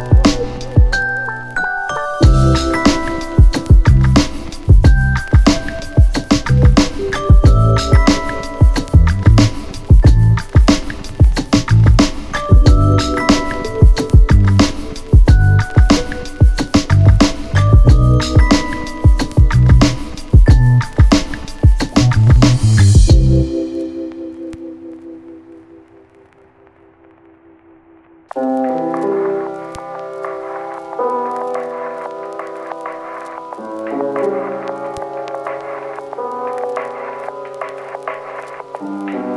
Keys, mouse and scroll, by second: 11.8-13.4 click, 23.7 ctrl+z, 27.1 click, 29.4-31.9 click, 31.9 ctrl+z, 33.6 click, 36.0 click, 36.9 p, 38.0-39.3 click.